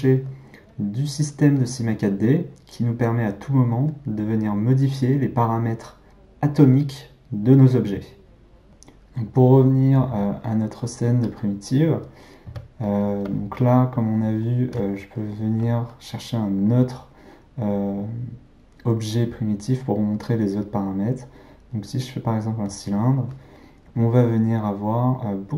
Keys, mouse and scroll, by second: 10.2 click, 11.2 click, 12.4 x, 14.6 shift+a.